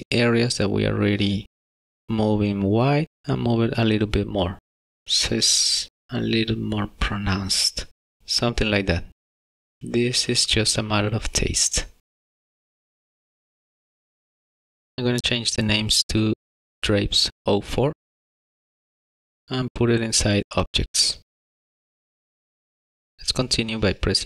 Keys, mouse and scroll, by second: 0.0 middle click, 0.2 alt+click, 0.5-1.4 alt+shift+click, 0.7 alt+shift+click, 1.7 alt+shift+click, 1.8 g, 9.8 Tab, 10.4 middle click, 12.5 scroll down 2, 13.1 click, 13.2 click, 13.4 click, 13.5 middle click, 14.5 shift+middle click, 14.8 click, 14.9 shift+middle click, 16.3 click, 16.5 click, 21.0 click, 21.8-22.3 scroll down 2, 21.9 shift+middle click, 22.1 ctrl+s, 22.1 middle click, 22.2 middle click, 22.3 middle click, 22.6 click, 22.9 middle click, 22.9 shift+middle click, 23.0 middle click, 23.1 shift+middle click, 23.2 middle click.